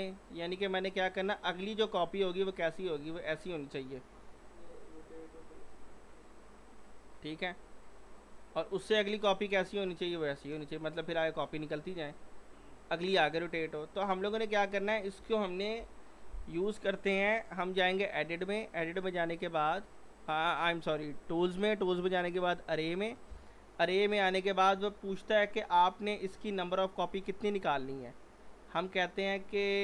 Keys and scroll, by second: 3.9 e, 15.8 Delete.